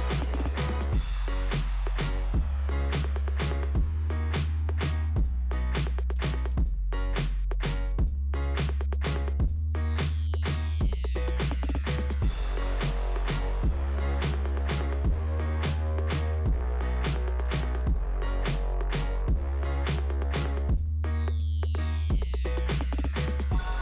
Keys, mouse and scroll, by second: 3.6 scroll down 2, 6.1 middle click, 7.2 scroll up 1, 9.9 scroll up 2, 12.9 scroll down 2, 14.8 scroll up 1, 19.1 click, 19.1 click, 19.2 click, 19.3 double click, 21.2-22.2 scroll down 2, 23.7 scroll up 2.